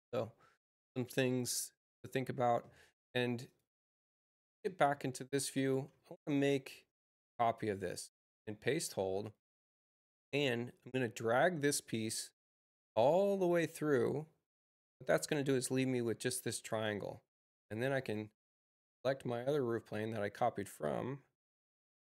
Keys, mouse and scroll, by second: 3.4 click, 5.6 space, 6.2 click, 7.9 c, 8.8 shift+c, 10.9-14.1 drag, 16.6 click, 17.9 Return, 18.8 click, 19.8 click, 20.7 Return, 21.6 click.